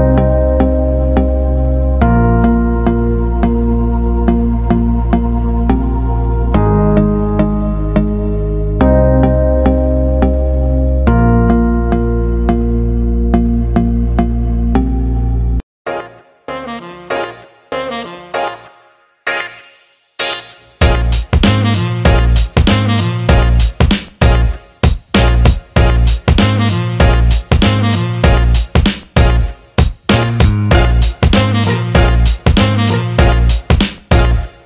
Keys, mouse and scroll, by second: 2.7 click, 6.6 alt+middle drag, 7.2 alt+middle click, 7.8 click, 8.7 alt+middle click, 11.7 click, 12.3 click, 13.7 click, 15.2 click, 16.3-17.5 shift+drag, 17.7 alt+middle click, 18.2 alt+shift+middle click, 18.7 alt+middle click, 19.4 alt+shift+middle click, 19.9 click, 21.2-22.8 shift+drag, 23.3 alt+middle drag, 27.0-28.5 drag, 29.4 click, 29.9 alt+middle click, 30.3 alt+middle drag, 30.8-31.1 alt+middle drag, 34.3-34.6 alt+middle drag.